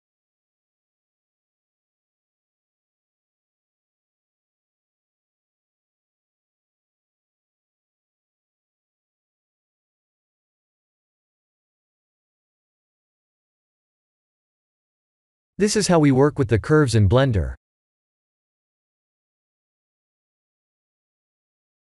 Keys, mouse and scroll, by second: 0.7 Tab, 1.7 click, 2.5 shift+click, 3.0 shift+drag, 3.4 v, 3.8 Tab, 4.3 Tab, 4.7 drag, 5.3 r, 7.0 click, 7.6 click, 8.6 r, 11.0 click, 11.2 Tab, 11.9 Tab, 12.3 click, 13.0 g, 14.5 click, 14.8 Tab, 15.9-16.4 alt+shift+middle drag, 16.7 Tab, 17.0 click, 17.5 shift+click, 18.0 shift+click, 18.7 shift+click, 19.2 shift+drag, 20.0 v, 21.7 click.